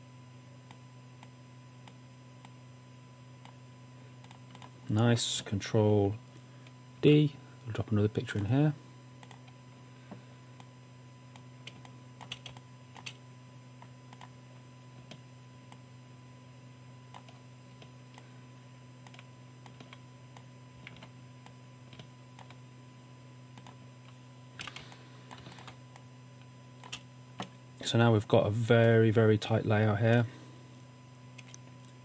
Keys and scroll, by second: 7.0 super+d, 11.8 space, 12.5 space, 15.5 typing, 21.0 super+z, 24.7-25.7 typing.